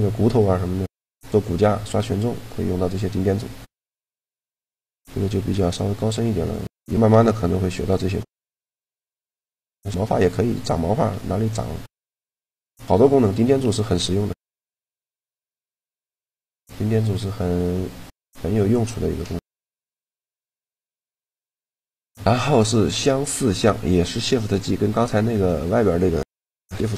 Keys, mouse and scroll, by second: 0.1-3.8 middle drag, 4.3-10.6 middle drag, 13.8-15.5 middle drag, 15.9-17.9 middle drag, 19.8-21.5 drag, 25.2 Tab, 26.3 shift+g.